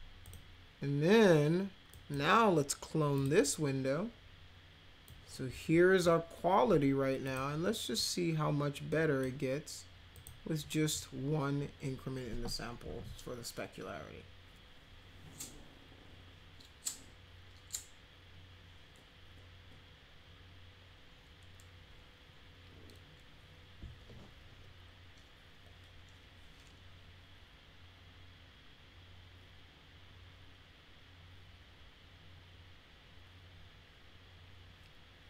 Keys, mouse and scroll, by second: 0.2 click, 1.9 drag, 3.1 click, 5.0-6.0 drag, 7.2 click, 7.9-9.1 drag, 10.1 click.